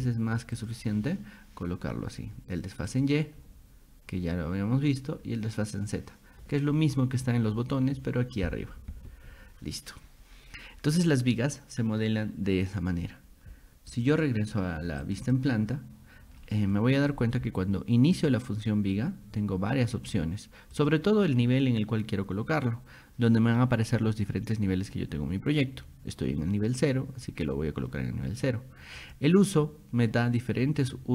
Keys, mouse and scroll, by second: 0.6 click, 2.9 click, 14.0 click, 14.1 click, 15.0 click, 15.3 click, 16.4 middle click, 18.2 click, 20.8 click, 27.3 click, 29.0 click.